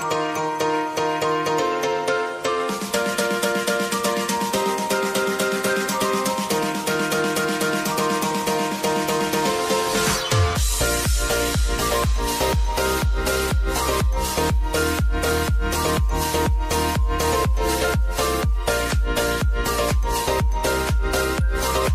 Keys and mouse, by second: 0.2 space, 2.4 click, 5.6 space, 8.2 click, 10.6 click, 11.1-12.0 typing, 13.3 click, 15.9 Return, 17.6 shift+click, 18.3 ctrl+d, 19.5 click.